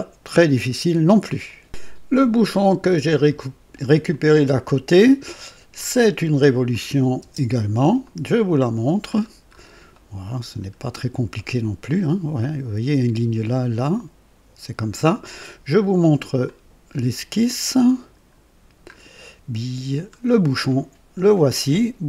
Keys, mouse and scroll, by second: 1.4 right click, 4.0 click, 4.8 scroll down 2, 5.7 click, 6.6 click, 7.1-8.0 typing, 7.9 click, 9.0-9.6 scroll up 2, 9.9-10.6 right drag, 10.7 scroll up 1, 11.3 right click, 16.0 click, 16.9 scroll up 1, 17.9-18.4 scroll down 2, 19.3 scroll down 1.